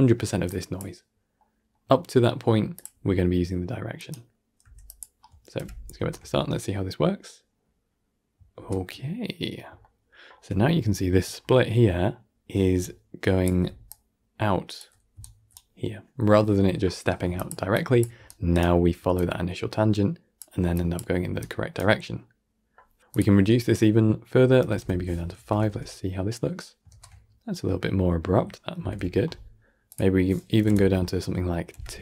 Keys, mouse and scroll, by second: 0.4 click, 1.3 middle click, 1.7-2.7 scroll up 2, 2.7 click, 2.8 g, 4.5 g, 5.5 shift+Left, 5.8 shift+space, 8.4 shift+space, 8.9-9.4 middle drag, 9.4 scroll up 1, 9.7-10.4 shift+middle drag, 10.4-10.8 scroll up 5, 10.8-11.2 shift+middle drag, 11.2-11.5 scroll up 1, 11.5-12.3 middle drag, 12.3 f, 12.4 f, 12.7 click, 13.5 d, 13.8 click, 14.6 d, 14.7 d, 15.0 d, 15.1-17.1 right drag, 17.1 d, 17.2 click, 17.9 d, 18.1 right click, 18.9 d, 19.0-20.3 drag, 20.3 d, 20.6 click, 21.2 d, 21.3-23.0 right drag, 23.0-25.2 drag, 25.2 shift+Left, 25.5 shift+space, 26.8 shift+space, 27.4-28.6 middle drag, 28.6 shift+Left, 29.8-31.6 drag, 31.6 shift+Left, 31.8 shift+space.